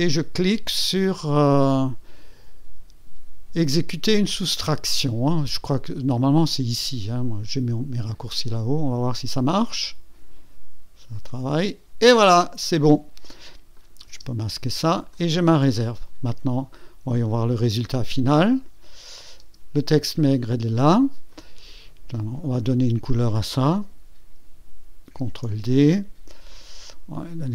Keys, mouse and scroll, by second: 8.1 click, 13.7 click, 14.1 space, 15.1 click, 16.9 scroll down 2, 18.5 click, 19.4 space, 21.3 click, 22.6 click, 25.1 ctrl+d, 26.5 click.